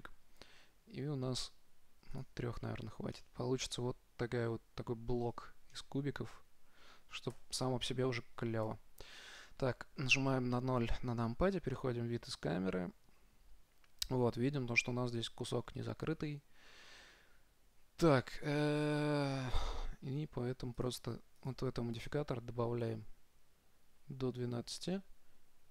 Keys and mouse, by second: 2.5 click, 3.4 middle click, 4.8 middle click, 5.6 middle click, 7.6 KP_0, 7.6 KP_Decimal, 9.1 KP_0, 18.6-23.1 drag, 23.4 click.